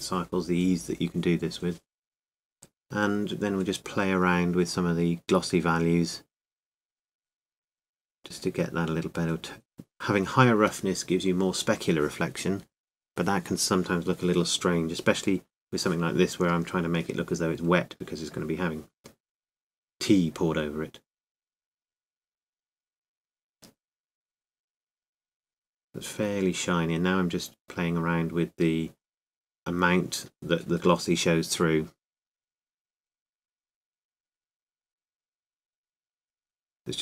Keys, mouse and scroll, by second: 2.3-9.7 middle drag, 9.7-15.2 drag, 17.8-19.7 scroll up 1, 19.7-24.8 drag, 26.5-28.6 drag, 28.6-34.5 middle drag, 34.5-37.0 drag.